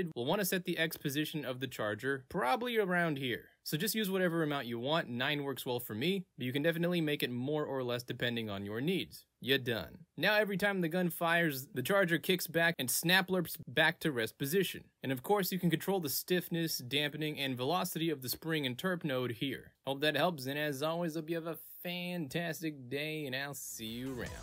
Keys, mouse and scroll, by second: 1.2 click, 2.0-8.6 drag, 9.0 ctrl+z, 9.2 click, 9.3 v, 14.2 click, 20.1 v.